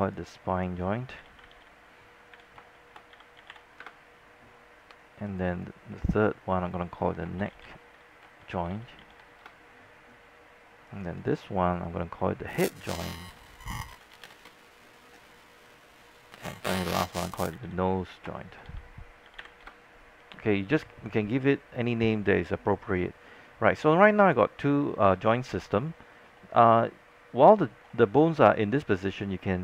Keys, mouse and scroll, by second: 1.2-4.1 typing, 5.4 click, 7.2-9.2 typing, 9.6 Return, 11.1 click, 12.8-15.0 typing, 16.1 click, 17.3-20.1 typing, 24.4 click, 25.4 alt+middle click, 25.9-26.6 scroll up 2, 26.4 alt+middle click, 27.8 scroll down 1, 28.0 alt+middle click, 28.5 scroll down 1, 28.7 alt+middle click, 29.4 scroll up 1.